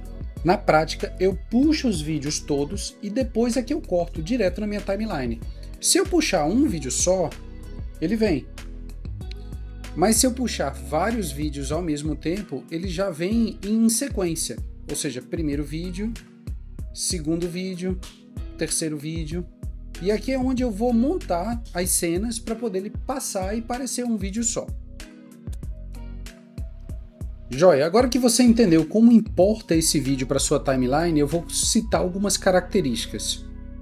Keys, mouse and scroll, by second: 9.6 Delete, 10.7 scroll up 1, 11.2 scroll up 1, 11.4 shift+click, 12.0 shift+click, 25.1 ctrl+a, 26.0 Delete.